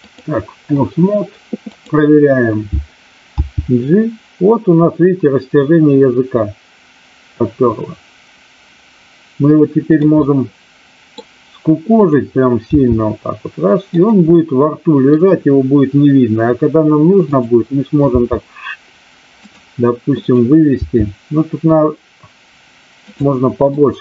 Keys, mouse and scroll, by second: 3.4 g, 9.8 click, 10.1-11.1 middle drag, 12.0-12.4 drag, 12.6 g, 14.0 click, 14.4 middle click, 18.0 g, 19.4 click, 20.1 click, 20.7 g, 23.0 click, 23.7-24.0 middle drag.